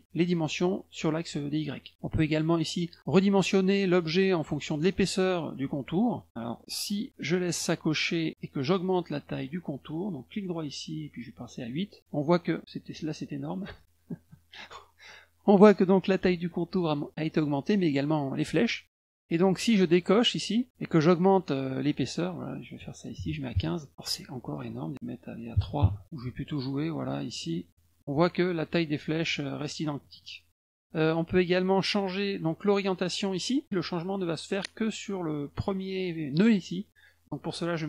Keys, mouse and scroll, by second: 7.6 click, 10.3 right click, 11.6 click, 13.2 right click, 14.3 click, 20.0 click, 21.3 click, 21.7 click, 24.4 click, 26.1 click, 26.3 click, 26.4 click, 26.6 click, 26.7 click, 26.9 click, 27.1 click, 27.2 click, 27.4 click, 27.6 click, 27.7 click, 27.9 click, 29.3 click, 29.5 click, 29.7 click, 29.8 click, 30.0 click, 30.2 click, 30.5 click.